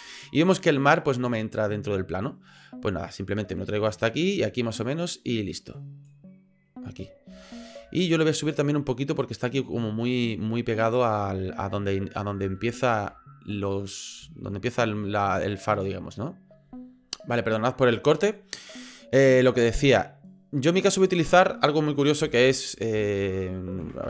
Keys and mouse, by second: 3.2-6.1 drag, 7.4-7.7 shift+middle drag, 11.8 middle click, 12.6 shift+middle drag, 13.6-14.1 middle drag, 14.5 shift+click, 16.0 click.